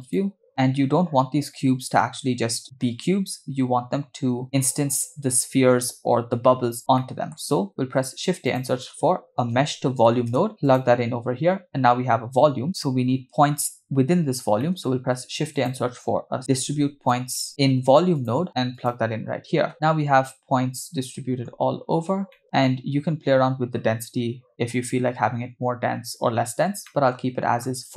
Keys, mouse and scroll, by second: 0.0 click, 0.5 middle click, 7.0 middle click, 7.8 shift+a, 14.6 shift+middle click, 15.0 shift+a, 19.7-21.6 middle drag, 22.0 scroll up 3, 22.3-24.6 middle drag, 26.4-26.8 scroll down 2, 26.9 middle click.